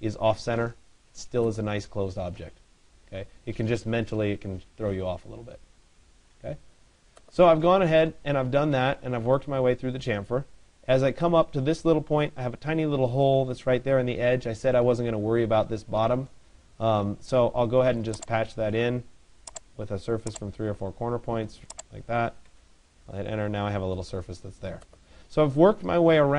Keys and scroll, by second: 22.1 Return.